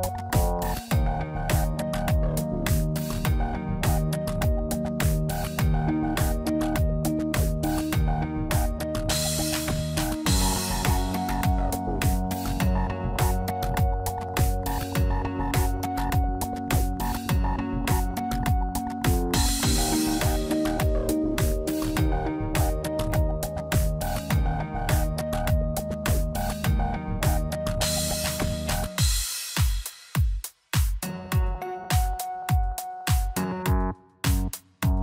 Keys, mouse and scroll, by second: 1.2 click, 2.0 click, 5.6 click, 6.0 shift+middle click, 6.4-7.0 scroll up 1, 7.0 click, 7.0-7.5 scroll up 1, 8.5 click, 9.7 shift+click, 9.8 shift+click, 10.4 click, 11.7 middle click, 12.9 click, 13.3 shift+click, 14.2 click, 15.5 middle click, 16.4 shift+middle click, 16.8 middle click, 17.3 scroll up 1, 17.8 middle click, 20.0 click, 21.6 p, 23.7 Tab, 24.3 click, 24.9 Tab, 25.4 click, 26.4 p, 27.4 Tab, 28.1 click, 28.9 middle click, 31.2 Tab, 31.9 middle click, 34.0 ctrl+r.